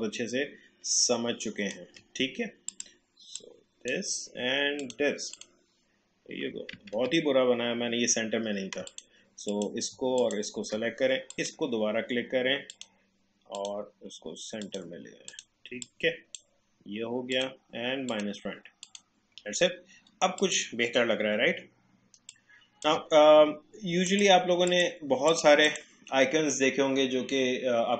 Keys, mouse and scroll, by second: 7.0 ctrl+z, 8.9 click, 10.2-17.3 shift+drag, 22.3 alt+shift+click.